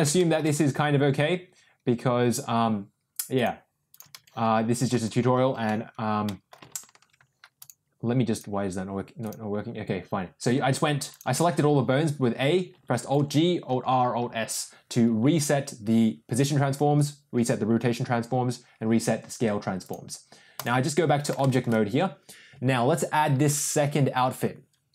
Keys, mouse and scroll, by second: 0.1 shift+middle click, 3.3-4.0 drag, 4.2 a, 4.9 alt+g, 5.3 alt+r, 6.2 middle drag, 6.7 alt+s, 9.3 click, 11.3 a, 13.0 alt+g, 13.6 alt+r, 14.2 alt+s, 19.7 click, 21.3 shift+middle drag.